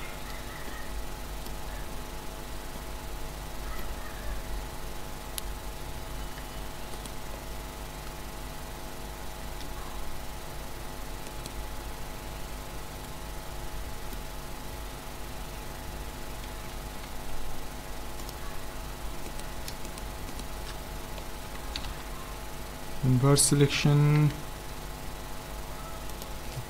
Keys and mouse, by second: 1.6 z, 6.4 Tab, 7.0-8.5 middle drag, 8.5 right click, 9.6 h, 11.3 right click, 11.7 Tab, 17.1 ctrl+Tab, 19.3-22.1 right drag, 21.8 ctrl+i, 22.9-25.0 drag, 24.2 x.